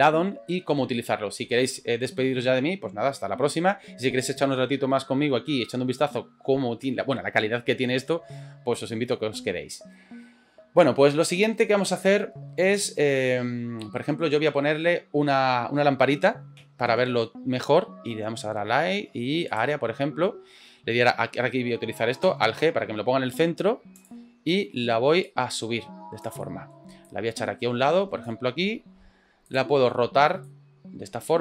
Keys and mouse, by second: 17.2 shift+a, 24.0 click, 25.4 click, 26.4 middle click, 27.1-28.3 drag, 29.5 click, 30.5 click.